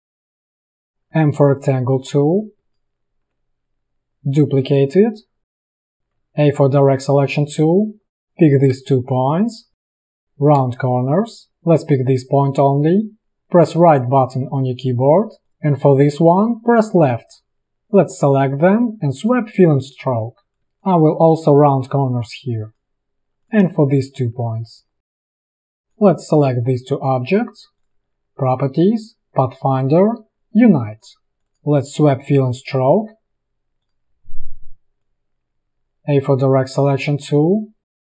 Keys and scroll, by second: 0.9 alt+space, 1.2 m, 6.2 shift+a, 10.7 space, 14.3 Right, 17.0 Left, 20.6 a, 23.9 space, 25.5 v, 31.4 p, 35.6 a.